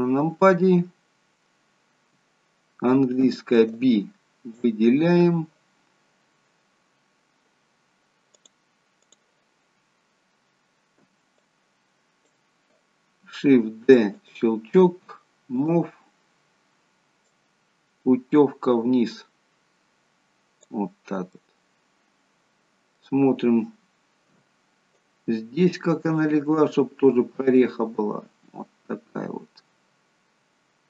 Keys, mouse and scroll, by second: 3.2 b, 8.4 click, 10.9 b, 13.7 shift+d, 15.6 click, 21.3 middle click, 24.2 KP_1, 26.1 click.